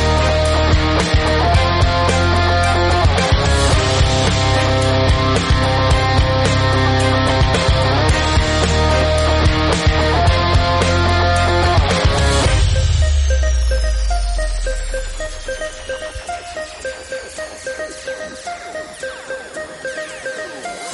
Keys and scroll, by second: 0.3-3.6 typing, 0.7 Tab, 1.2 Tab, 4.8 space, 6.0 typing, 6.4 Return, 7.6 space, 8.9-11.3 typing, 12.3 space, 12.4 space, 13.5 space, 13.7 space, 15.7 space, 17.3 space, 17.7 space, 19.3 space, 19.7 space.